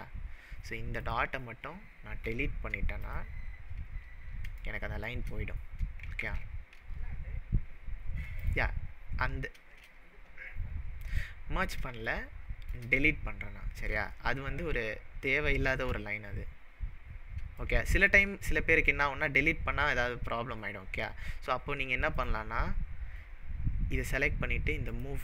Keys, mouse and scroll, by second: 1.0 click, 2.3 Delete, 3.5-4.4 scroll down 14, 4.7-5.1 shift+middle drag, 6.2 ctrl+z, 8.4 click, 9.1-9.5 scroll up 5, 11.1-11.7 scroll down 1, 12.1-12.9 shift+middle drag, 14.1-15.9 shift+middle drag, 17.7-19.1 shift+middle drag, 21.2-22.1 scroll up 4, 22.2 click, 24.9-25.2 drag.